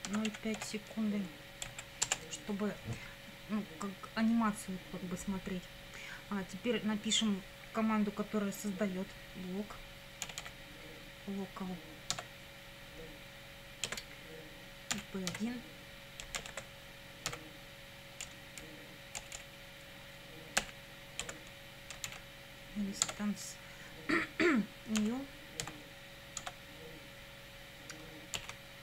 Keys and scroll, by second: 0.0-1.1 typing, 1.7 Right, 2.0 Return, 10.0-10.9 typing, 12.1 Tab, 13.9 space, 15.0-18.2 typing, 20.6 =, 21.2 space, 22.1 shift+i, 23.0 Tab, 25.0 ., 25.6 n, 26.4 Tab, 28.4 shift+'.